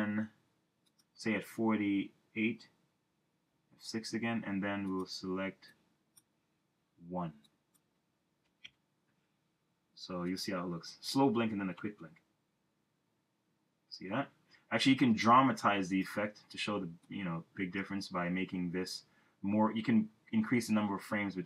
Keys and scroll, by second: 3.5 F6, 8.5 1, 8.7 Return, 11.8 Return.